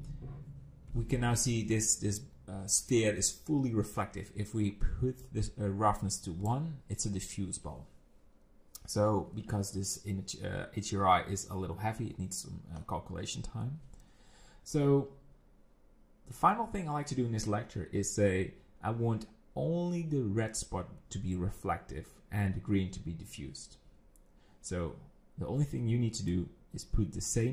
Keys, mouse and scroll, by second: 5.2 click, 26.3 click.